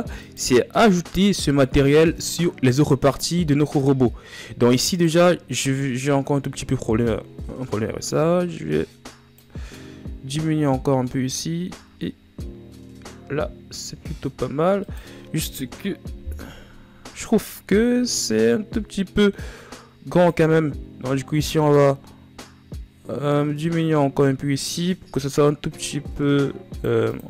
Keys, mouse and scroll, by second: 0.9-6.9 right drag, 6.9-8.3 middle drag, 8.3-12.0 drag, 12.0 a, 13.8 shift+scroll up 2, 16.3 scroll up 4, 18.8-20.1 middle drag, 20.1-23.5 drag.